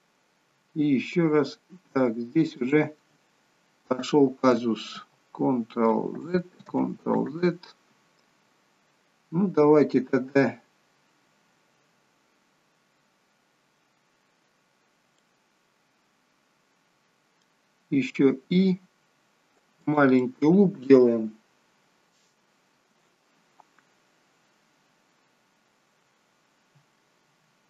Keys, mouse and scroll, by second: 0.4 i, 4.8 ctrl+x, 6.1 ctrl+z, 6.6 ctrl+z, 7.3 ctrl+z, 15.1 middle click, 18.1 i, 20.2 middle click.